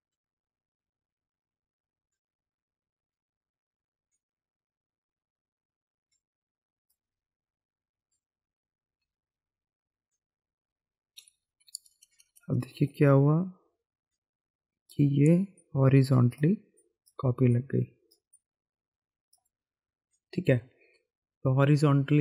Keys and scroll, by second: 9.0 e, 9.2 e, 11.2-12.5 typing.